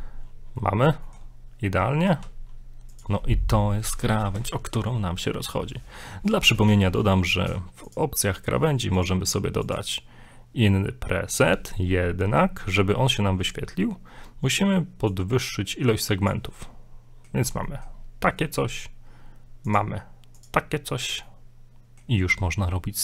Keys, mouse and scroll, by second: 0.6-0.9 middle drag, 2.1 ctrl+b, 7.9 click, 9.0 click, 15.1 click, 16.7 middle click, 17.7 middle click, 18.0 scroll up 1, 19.7 click, 21.3 middle click.